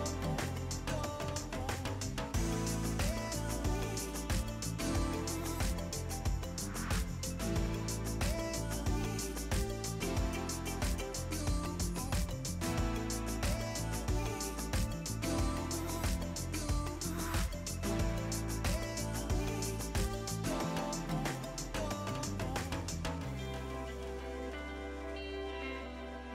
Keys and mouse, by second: 0.7 shift+click, 0.9 shift+click, 1.3 shift+click, 1.6 right click, 2.1 click, 3.9 right click, 4.1 click, 4.8 Pause, 5.2 click, 5.5 right click, 6.1 click, 7.7-12.1 typing, 8.0 ctrl+click, 8.6 Return, 8.9 click, 9.4 ctrl+click, 10.1 click, 10.6 ctrl+click, 11.0 Return, 11.3 click, 11.9 ctrl+click, 12.3 Return, 12.9 click, 14.0 right click, 14.3 click, 15.1 s, 15.9 e, 16.7 click, 20.0 c, 20.3 KP_4, 20.4 Return, 20.8 click, 22.8 KP_5, 22.9 Return, 23.4 click, 23.6 ctrl+shift+x, 23.7 click, 25.4 ctrl+x, 25.5 click.